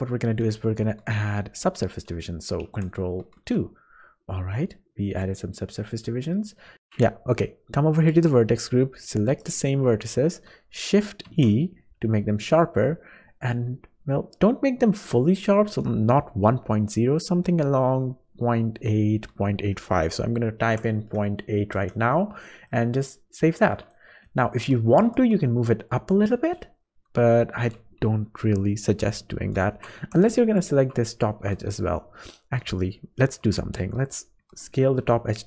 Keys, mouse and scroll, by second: 2.7 ctrl+2, 4.0-4.4 scroll down 4, 6.4 scroll up 4, 6.7 Tab, 6.7 alt+a, 8.0 click, 9.3 click, 10.3 middle click, 11.3 shift+e, 22.7 middle click, 23.6 middle click, 25.0 g, 30.0 3, 30.6 shift+click, 32.9 shift+middle click, 34.4 s.